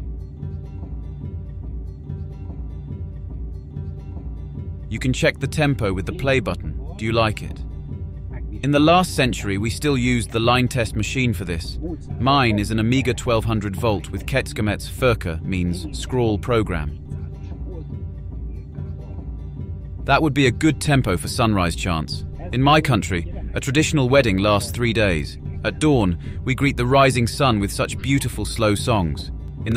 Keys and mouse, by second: 6.0 click, 21.4-22.6 drag.